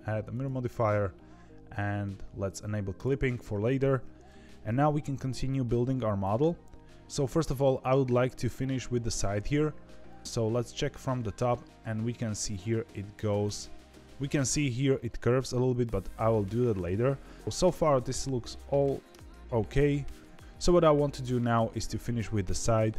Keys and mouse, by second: 2.9 click, 6.2 KP_3, 10.2 KP_7, 11.1 shift+middle click, 15.8-16.8 shift+middle drag, 19.0 KP_3, 19.9 shift+middle click.